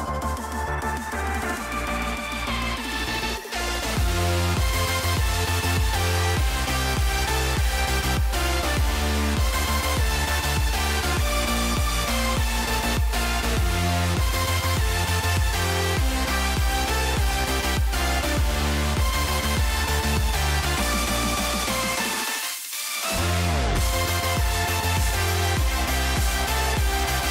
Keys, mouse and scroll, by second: 0.2 right click, 1.4 scroll up 2, 2.0-2.5 scroll up 2, 3.3 middle click, 4.0 scroll up 2, 4.5 click, 5.0 click, 5.7 click, 6.1 click, 9.7 click, 11.9 click, 12.8 middle click, 13.4 click, 13.7 click, 17.7 middle click, 19.2 click, 19.3 middle click, 20.0 click, 20.6-21.7 drag, 21.7 middle click, 22.3 click, 24.4 click, 25.5-27.3 drag, 26.6 middle click.